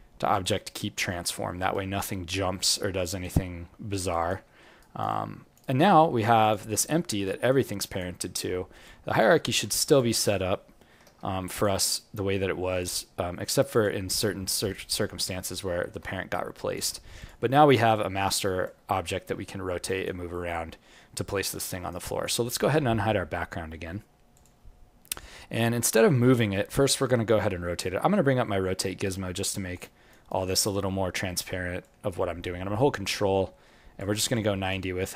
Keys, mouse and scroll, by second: 1.1 alt+middle click, 1.7 alt+right click, 2.0 alt+click, 4.1 alt+right click, 4.4 alt+middle click, 4.8 alt+right click, 5.6 alt+right click, 5.9 alt+middle click, 6.4 click, 7.2 g, 8.3-8.8 scroll up 5, 8.8 alt+click, 9.4 alt+middle click, 9.9 click, 11.0 g, 12.4-12.8 scroll up 4, 12.8 click, 14.1 g, 15.3-16.5 scroll down 7, 15.7 alt+middle click, 16.5 alt+click, 16.6 alt+click, 17.2 click, 17.5 alt+middle click, 17.9 alt+click, 19.2 r, 20.5 alt+click, 21.5 alt+middle click, 21.7 alt+right click, 22.0 alt+click, 24.3 click, 24.9-25.6 scroll up 4, 25.6 alt+click, 27.9 space, 29.7 alt+click, 30.3 alt+right click, 31.7 click, 34.3 alt+click.